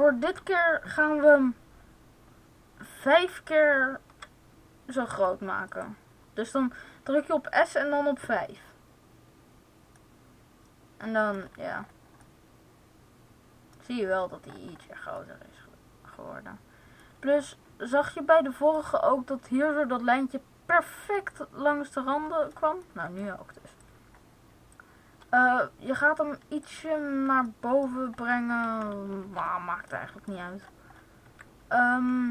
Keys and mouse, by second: 4.0 s, 5.7-7.4 drag, 11.7-14.3 middle drag, 18.0 middle click, 18.2 middle click, 23.7-25.3 drag, 29.2 ctrl+z, 31.2 a.